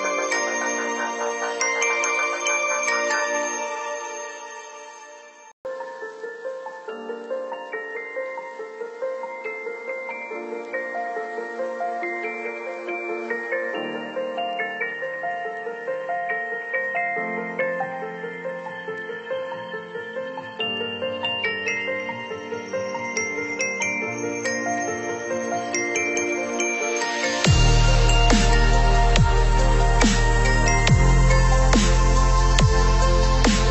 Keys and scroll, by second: 4.4 ctrl+-, 5.2 ctrl+0, 13.4 ctrl+z, 14.5 ctrl+c, 14.7 ctrl+v, 18.0 ctrl+=.